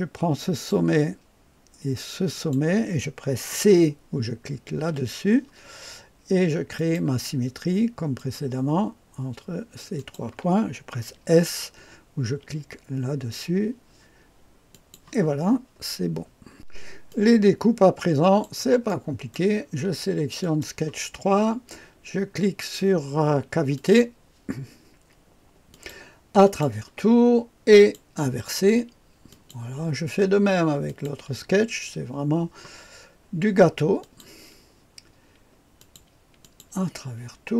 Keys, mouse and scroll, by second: 0.5 click, 2.3 click, 4.7 c, 6.7 click, 8.1 click, 9.9 click, 12.2 typing, 14.6 click, 15.5-16.2 typing, 16.5-18.4 drag, 20.3 click, 23.7 click, 25.7 click, 26.4 click, 27.7 click, 29.2 click, 30.8 click, 34.0 click, 35.7 click, 36.4 click.